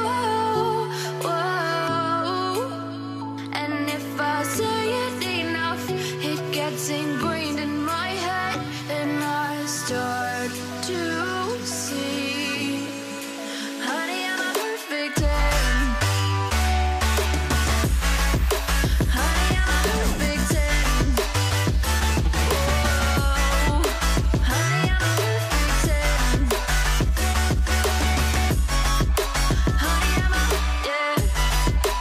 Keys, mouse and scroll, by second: 0.6 Tab, 0.9-1.5 typing, 1.3 Return, 3.9 double click, 10.4 Return, 10.7 v, 11.3 alt+click, 12.0 ctrl+t, 12.2 ctrl+right click, 15.4 Return, 16.2 Up, 17.0 Right, 17.2 Right, 22.8 v, 28.5 right click, 28.8 double click, 29.5 typing, 31.3 double click, 31.5 typing, 31.6 Return.